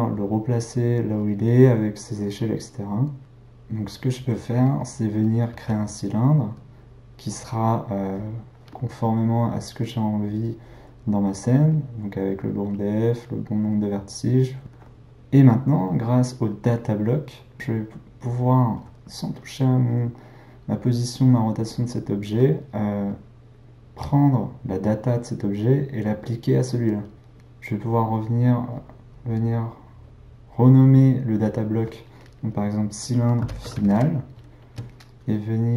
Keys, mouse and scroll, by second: 3.2-4.8 middle drag, 5.5 shift+a, 9.9-14.6 drag, 15.5 click, 19.3 click, 24.0 click, 27.9 click, 28.0-31.0 drag.